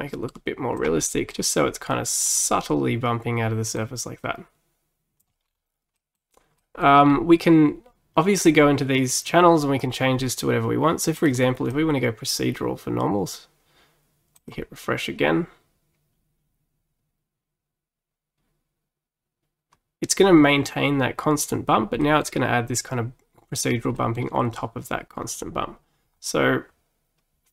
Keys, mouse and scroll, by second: 1.1 middle click, 1.4-1.9 scroll up 2, 2.0 middle click, 2.4 scroll up 1, 3.8-5.5 drag, 5.5 scroll down 4, 6.0-7.1 middle drag, 7.1-8.4 scroll down 2, 8.4-11.6 drag, 14.4-17.5 drag, 22.1-26.2 middle drag, 26.2-27.5 scroll up 2.